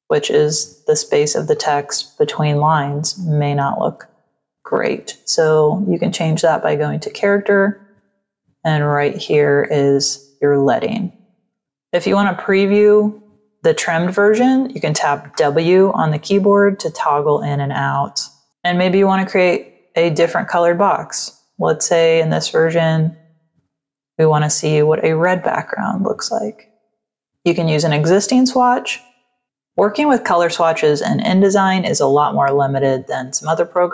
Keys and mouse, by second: 1.4 click, 3.6 ctrl+a, 5.9 click, 9.2 click, 11.5 click, 15.3 w, 17.8 ctrl+-, 18.5 click, 19.7 click, 21.4 click, 25.3 click, 26.4 click.